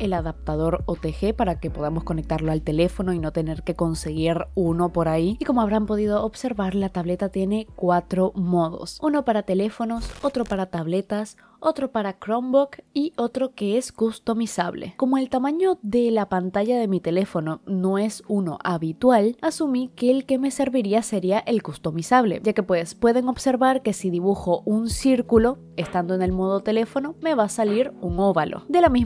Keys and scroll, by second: 0.8 i, 3.5 i.